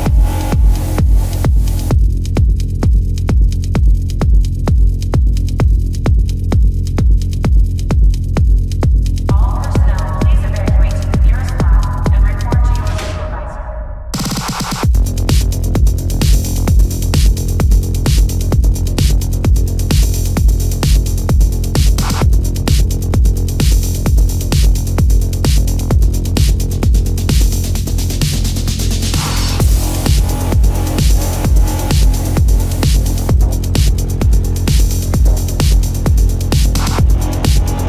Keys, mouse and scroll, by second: 0.5 ctrl+-, 0.9 ctrl+-, 1.0 space, 1.1 ctrl+-, 1.6 ctrl+alt+z, 2.5 ctrl+alt+z, 3.2 ctrl+alt+z, 3.3 ], 3.7 space, 11.8 ctrl+=, 31.8 ctrl+alt+z.